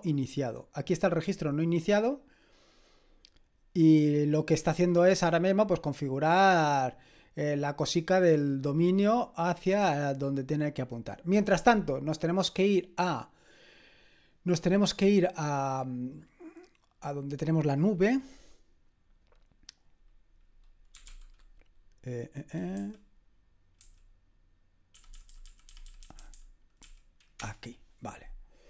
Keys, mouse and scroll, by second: 2.8-6.5 scroll down 2, 6.5-7.8 scroll down 1, 7.8-14.1 scroll down 1, 14.1 click, 20.7-21.6 typing, 22.8 Down, 23.8 Up, 25.0 Down, 25.1 Down, 25.3 Down, 25.4 Down, 25.7 Down, 25.9 Down, 26.0 Down, 26.2 Down, 26.3 Down, 26.8 Up, 27.4 Return.